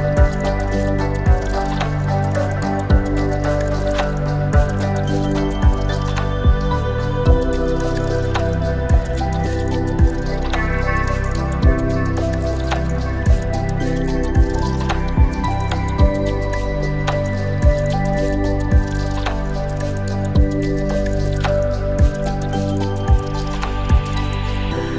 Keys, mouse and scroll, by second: 0.0 click, 0.4 click, 1.0 click, 3.0 shift+a, 6.8-9.2 drag, 8.1 KP_0, 10.1-11.0 middle drag, 10.1-11.0 scroll down 1, 11.3 Tab, 11.8 click, 12.8 2, 12.9 click, 13.9 e, 14.4 z, 16.5 click, 17.3 scroll down 1, 18.0 click, 19.8 middle click, 20.5 ctrl+b, 22.7-23.4 scroll up 2, 24.5 click, 24.5 scroll up 2.